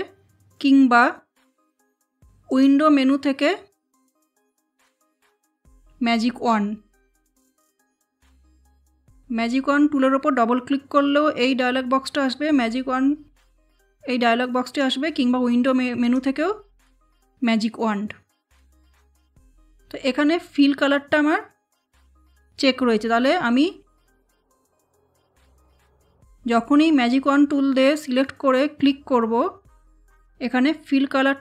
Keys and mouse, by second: 6.8 click, 13.5-16.0 drag, 18.8 click.